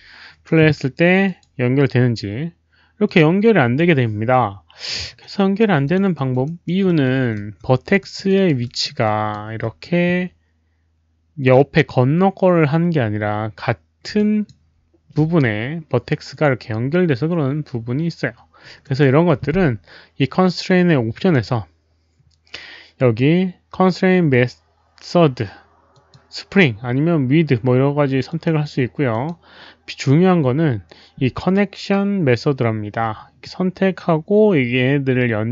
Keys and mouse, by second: 1.2 alt+click, 3.1 click, 4.3 alt+click, 4.3 alt+middle click, 4.8 alt+middle click, 4.8 right click, 5.1 alt+click, 5.8 alt+click, 6.1 alt+middle drag, 6.4 alt+right drag, 6.5 alt+click, 6.8 alt+middle drag, 7.0 alt+click, 7.3 4, 7.9 alt+click, 8.2 alt+right drag, 8.6 alt+4, 8.6 alt+middle drag, 9.0 alt+click, 9.6-10.7 typing, 10.2 alt+click, 10.2 alt+middle click, 10.2 alt+right click, 12.3-14.7 typing, 12.5 alt+click, 12.5 alt+middle click, 12.5 alt+right click, 14.1 alt+click, 14.2 alt+middle click, 14.2 alt+right click, 17.4-18.1 typing, 17.6 alt+click, 17.6 alt+middle click, 17.6 alt+right click, 18.8 alt+right click, 19.6-20.3 typing, 19.8 alt+right click, 19.8 alt+click, 21.1 alt+click, 25.9 click, 25.9 alt+right click, 25.9 5, 28.2 click, 28.4 alt+right click, 29.0 click.